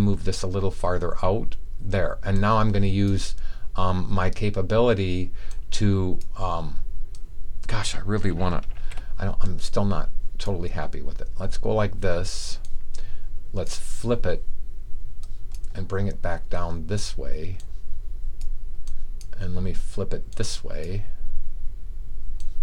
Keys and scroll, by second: 8.7 t.